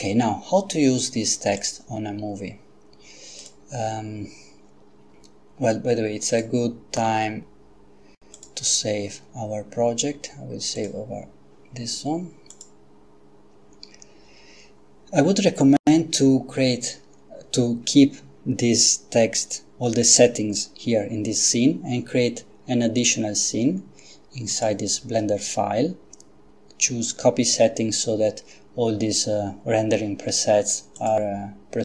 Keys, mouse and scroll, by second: 1.6 click, 3.4 click, 6.3 click, 8.4 click, 10.8 click, 12.5 click, 24.5 click, 31.0 click.